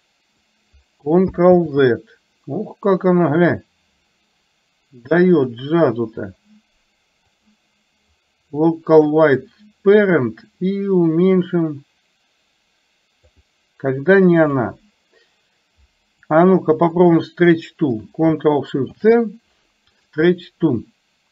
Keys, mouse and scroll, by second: 5.4 click, 7.4-9.2 drag, 10.4-13.4 drag, 16.3 click, 17.2 shift+click, 19.1 ctrl+shift+c.